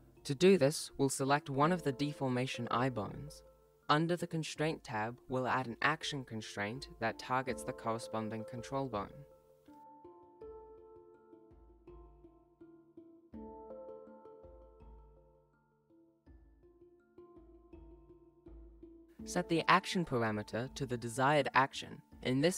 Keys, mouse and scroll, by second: 0.0 click, 2.2-2.6 scroll up 3, 3.4 right click, 4.7 shift+middle click, 4.7 ctrl+scroll down 1, 6.1 click, 9.7-10.9 scroll down 2, 10.9 click, 13.5-14.2 scroll down 1, 14.2 click, 19.4 click.